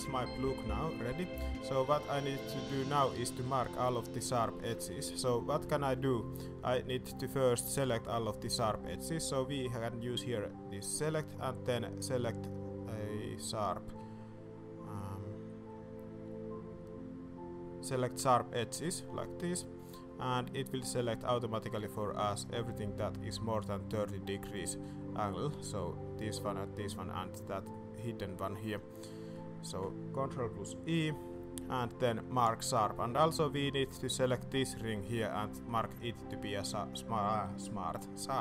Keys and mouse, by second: 0.9 shift+click, 1.4 middle click, 1.7 shift+middle click, 2.5 shift+middle click, 4.8 shift+middle click, 5.1 middle click, 5.7 shift+middle click, 10.8-18.8 drag, 27.7-29.3 middle drag, 31.0 ctrl+e, 33.1 alt+a, 33.7 alt+click.